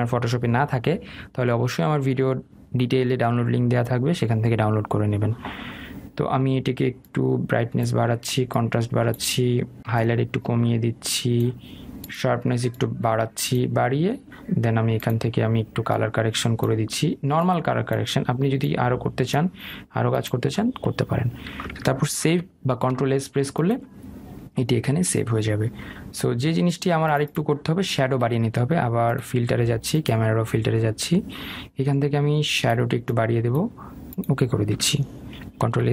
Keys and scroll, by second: 23.0 ctrl+s.